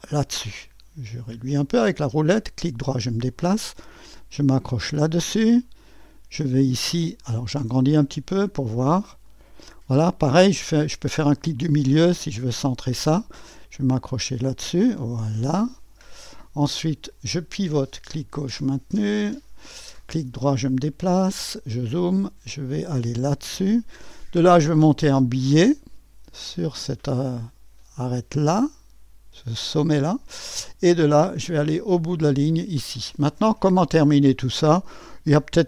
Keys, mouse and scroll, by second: 0.0 click, 2.7 right click, 4.9 click, 5.8 right click, 8.0 right click, 9.3 right click, 11.4 middle click, 12.3 click, 15.0 click, 18.1-19.4 drag, 20.0 click, 20.0 middle click, 20.0 right click, 23.8 click, 29.4 click, 32.5 click.